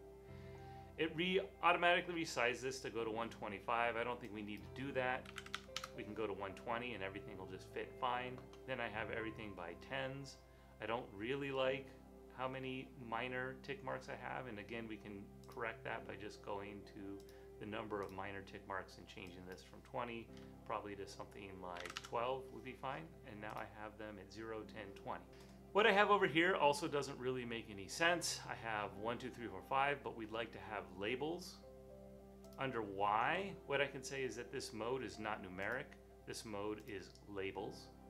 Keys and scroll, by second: 5.1-5.8 typing, 8.5-9.2 typing, 21.8 typing.